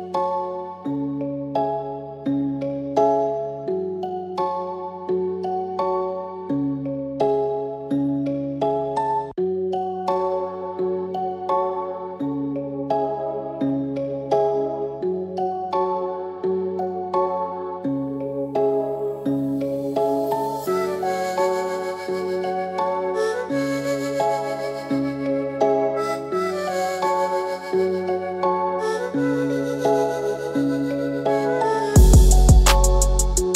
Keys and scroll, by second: 7.6 ctrl+alt+x, 9.0 b, 12.3 c, 12.7 ctrl+b, 12.9 Right, 13.6 Right.